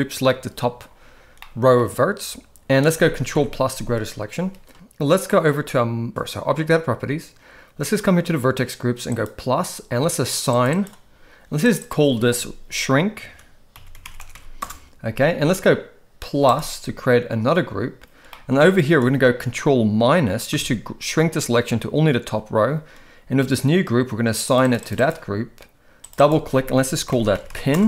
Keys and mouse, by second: 1.4-1.8 middle drag, 3.4 ctrl+KP_Add, 9.1 click, 10.5 click, 10.7 click, 11.9-14.7 drag, 16.5 click, 18.4 middle click, 20.6 ctrl+KP_Subtract, 24.6 click, 24.8 click, 25.0 click, 26.2-27.8 drag.